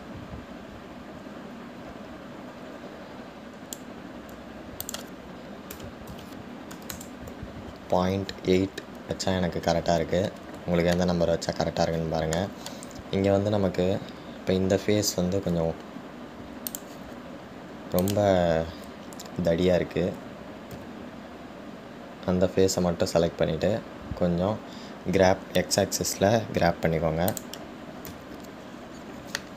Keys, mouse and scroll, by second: 1.0-4.1 drag, 6.0-9.2 drag, 12.2-15.2 shift+middle drag, 18.0 click, 19.2 click.